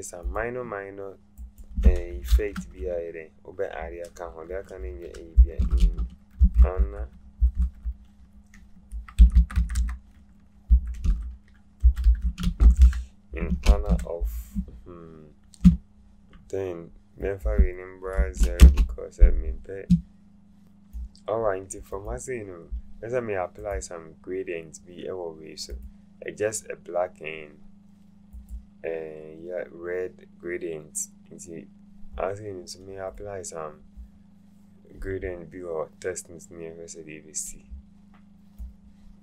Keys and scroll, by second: 5.3-8.0 typing, 9.2-13.2 typing, 13.4 Return, 18.1 KP_0, 18.6 Return.